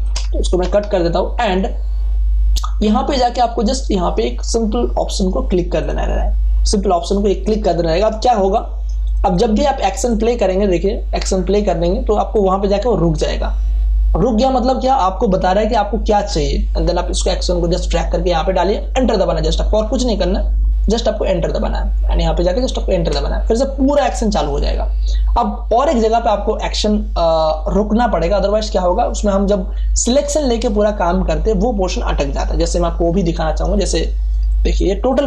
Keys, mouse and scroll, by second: 0.6 alt+i, 0.8 alt+p, 1.3 ctrl+d, 5.8 click, 8.2 space, 8.5 ctrl+click, 17.1-22.9 drag, 22.9 Return, 33.7 space, 33.9 ctrl+click.